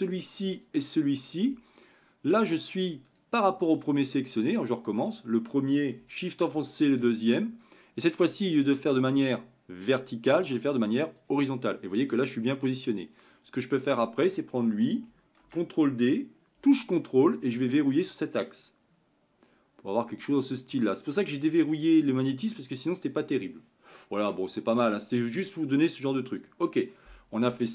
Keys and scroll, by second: 16.3 ctrl+d.